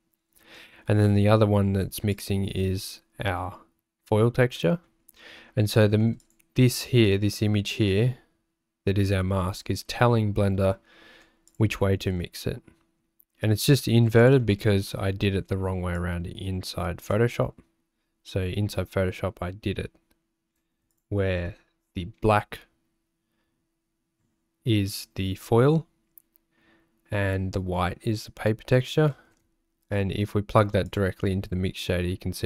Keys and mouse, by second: 0.6 click, 4.7 click, 5.3 click, 11.8 ctrl+shift+click, 14.2 click, 14.5 z, 15.0 click, 15.9-17.1 drag, 21.0 ctrl+shift+click, 31.2 ctrl+shift+click.